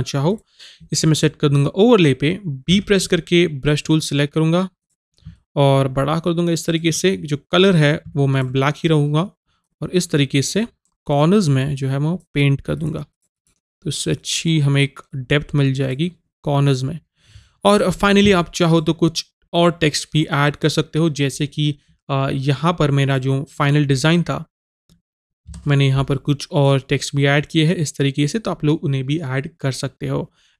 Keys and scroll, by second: 2.8 b, 25.6 Return.